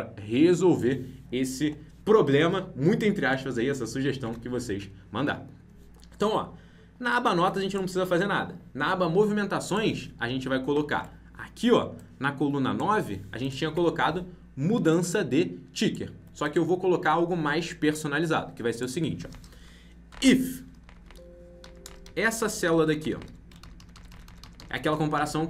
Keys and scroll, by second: 4.2 alt+Tab, 10.9 alt+Tab, 22.6 ctrl+Right, 23.1 ctrl+Left, 23.5 ctrl+shift+Right.